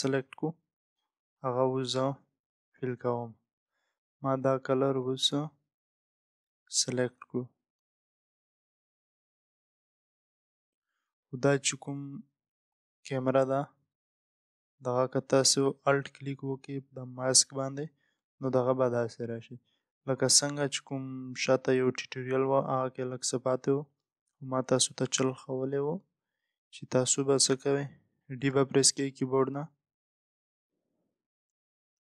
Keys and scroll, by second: 3.3 alt+BackSpace, 25.5 ctrl+0.